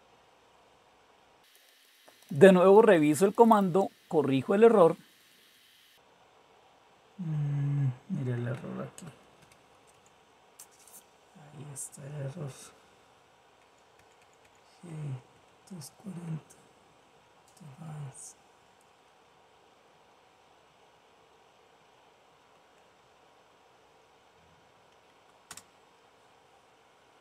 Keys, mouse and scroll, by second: 0.0 Return, 0.0 typing, 1.3-4.1 typing, 4.9-5.3 Up, 5.4 Up, 5.5 Up, 5.9-7.6 Right, 8.0 Right, 9.9 Menu, 10.0 Delete, 13.6 Left, 14.0 Left, 14.4 Left, 14.7 Left, 15.2 Right, 15.5 Right, 15.9 Right, 16.2 Right, 16.6 Right, 16.9 Right, 17.4 Right, 17.7 Right, 18.1 Right, 18.4 Right, 19.1 Right, 20.2 Right, 20.6 Right, 21.0 Right, 21.4 Right, 22.1 Right, 22.2 Right, 22.8 Right, 22.9 Right, 23.5 Right, 23.9 Right, 24.3 Right, 24.7 Right, 25.5 Return.